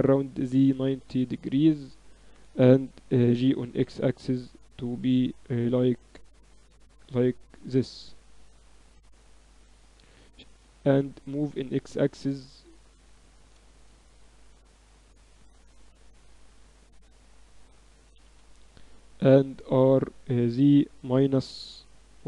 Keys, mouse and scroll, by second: 3.2 g, 8.2-11.5 drag, 10.3 shift+d, 14.4-15.5 middle drag, 15.5-17.2 drag, 18.0 r.